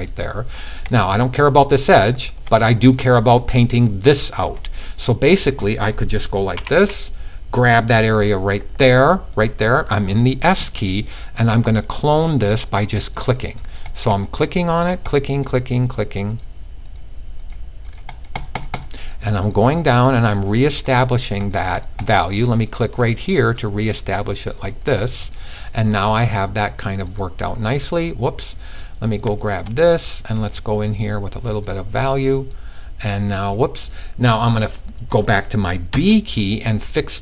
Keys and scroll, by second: 6.0-6.4 typing, 35.4 b.